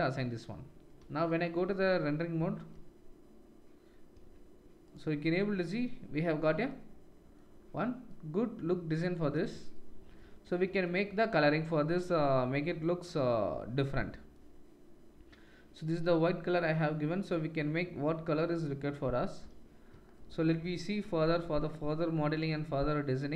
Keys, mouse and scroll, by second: 1.1-4.9 middle drag, 1.1-4.9 right drag, 1.1 z.